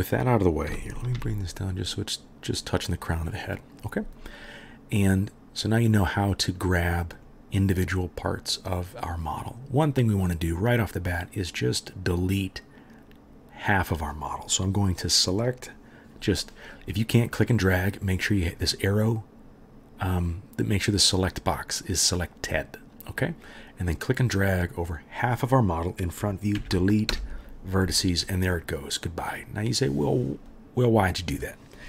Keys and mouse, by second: 0.7 g, 12.2-12.6 drag, 12.8 click, 13.1 middle click, 13.1 click, 16.4-21.9 drag, 21.9-23.2 right drag, 23.2-23.9 drag, 24.1 click, 26.6 Delete.